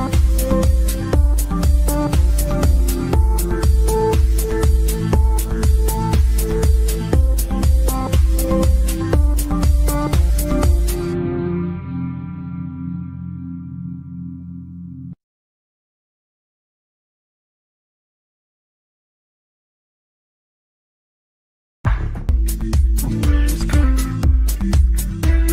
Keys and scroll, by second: 16.9 shift+Page_Down, 17.2 ctrl+Page_Up.